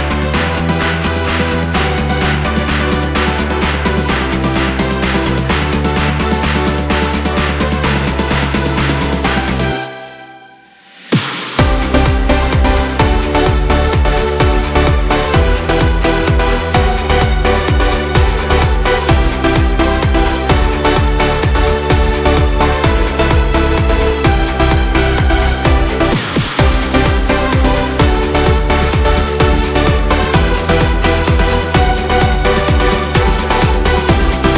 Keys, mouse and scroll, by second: 1.0 s, 2.9 r, 5.5 scroll up 2, 5.9-10.1 middle drag, 11.7 alt+e, 14.6 scroll down 1, 14.8-17.8 middle drag, 21.4 scroll down 1, 21.6 middle click, 22.3 ctrl+z, 22.8-23.9 middle drag, 23.9 alt+e, 27.3-28.7 middle drag, 28.7-29.1 scroll up 3, 29.1-30.4 middle drag, 30.4 ctrl+z, 31.0-32.6 middle drag, 32.6 ctrl+z, 33.0 ctrl+z, 33.9 scroll down 2, 34.2 middle click.